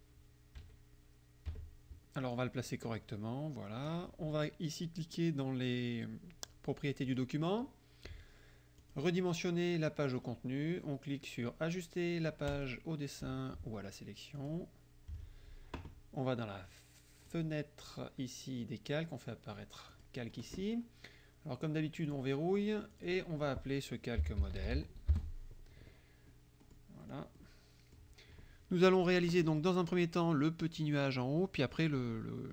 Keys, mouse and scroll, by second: 0.7 KP_Subtract, 1.6 KP_Subtract, 2.4-4.2 drag, 7.1 click, 8.9 click, 12.6 click, 14.4 click, 17.4 click, 20.0 click, 22.1 click, 23.0 click, 24.0-25.3 typing, 26.7 click, 27.1 click.